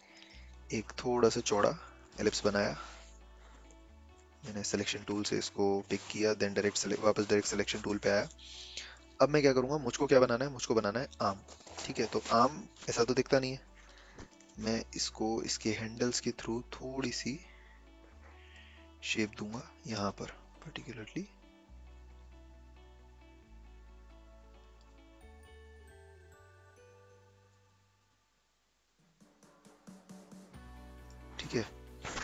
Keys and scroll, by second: 2.7 v, 9.5 a.